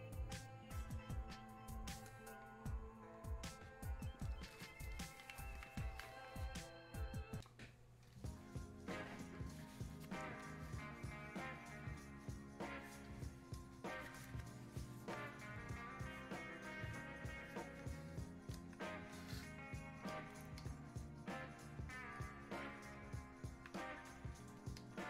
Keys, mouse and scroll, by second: 20.1-25.0 alt+drag.